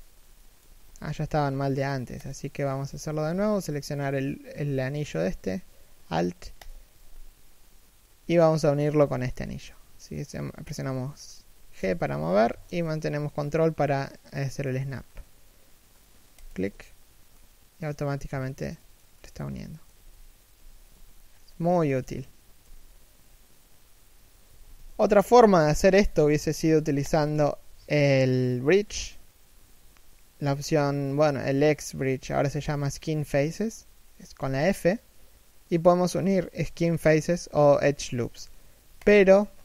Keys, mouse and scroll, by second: 0.3 a, 1.2 ctrl+n, 2.6 a, 3.0 z, 3.3 3, 4.3 1, 6.3 alt+right click, 11.5 g, 17.0 middle click, 19.6 3, 20.2 1, 20.6 z, 20.9-25.2 scroll down 1, 25.5-26.7 scroll up 1, 26.7 alt+shift+right click, 34.1 f.